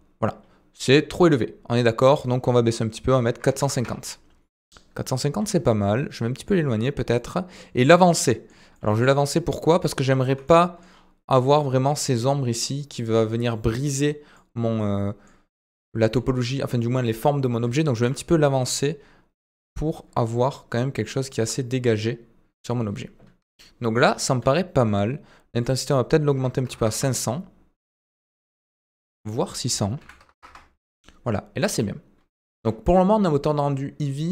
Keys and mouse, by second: 2.0-4.3 drag, 7.1-7.7 middle drag, 8.0-8.6 middle drag, 10.5-10.8 middle drag, 14.3-15.3 middle drag, 15.5 middle drag, 16.1 shift+middle drag, 19.9-21.3 middle drag, 24.5-24.9 shift+middle drag, 25.8-27.4 drag, 29.3-31.3 drag, 32.3 shift+drag.